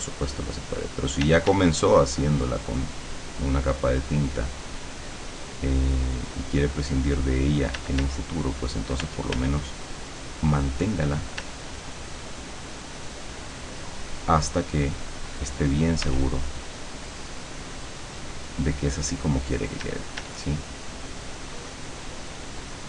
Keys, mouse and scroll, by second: 1.3 d, 1.8-7.9 drag, 7.8 d, 8.2 click, 9.1 f, 9.6-11.5 drag, 11.4 d, 11.8-13.5 drag, 13.7-16.4 drag, 16.1 f, 16.5-19.9 drag, 19.9 d, 20.4-21.7 drag.